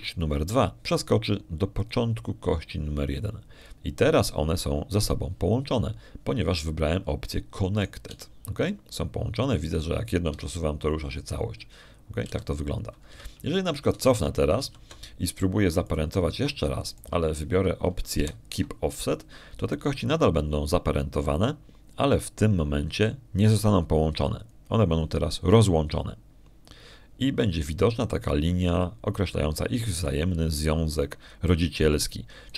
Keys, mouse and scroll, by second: 3.7 click, 9.6 right click, 9.9 g, 12.1 Escape, 14.1 g, 14.9 Escape, 15.8 ctrl+z, 16.5 ctrl+z, 17.7 click, 18.7 shift+click, 20.0 ctrl+shift+p, 26.3 click.